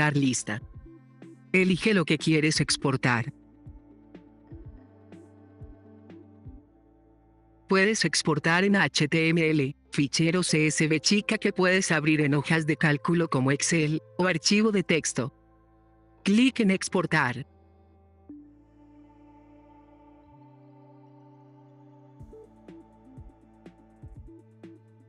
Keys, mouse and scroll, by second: 0.4 right click, 0.6-1.4 drag, 2.1 click, 4.7-6.3 drag, 14.8 click, 17.3 click, 21.0-22.0 drag, 22.6 click, 24.2 click.